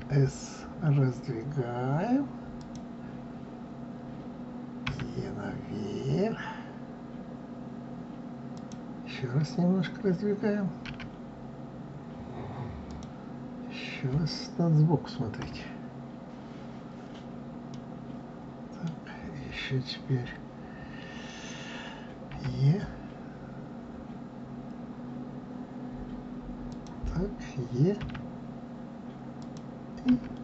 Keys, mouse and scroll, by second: 4.8 e, 10.8 s, 15.3 KP_3, 17.7-20.7 middle drag, 22.3 e, 28.0 e, 30.1 s.